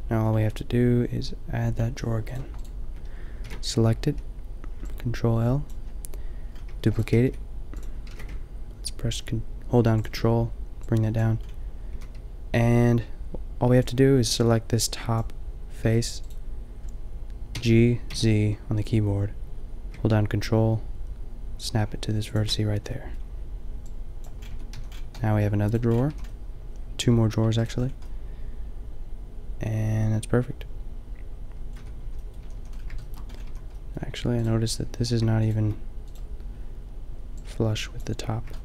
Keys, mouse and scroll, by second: 1.7-3.0 drag, 3.0 middle click, 3.1-4.5 drag, 3.5 ctrl+l, 5.7 ctrl+l, 6.7 shift+d, 7.1 g, 8.1 g, 11.9 a, 13.7 b, 15.8 g, 16.4 click, 17.5 g, 22.4-24.1 drag, 24.6 Tab, 24.8 a, 26.1 a, 28.7-30.1 middle drag, 30.4 middle drag, 30.4 scroll up 1, 30.8-31.2 middle drag, 31.9 Tab, 32.5 a, 32.6 a, 33.5 a, 34.4-36.4 drag.